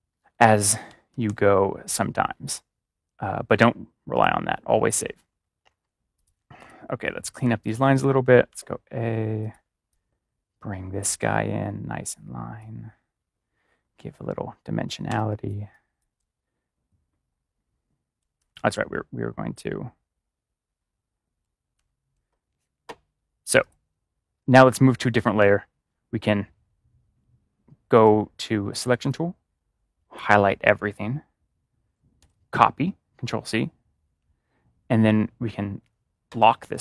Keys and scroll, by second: 1.0 ctrl+=, 15.0-16.1 typing, 18.1 space, 18.3 ctrl+-, 21.7 ctrl+z, 25.1 ctrl+z, 25.3 ctrl+-, 32.1 ctrl+c.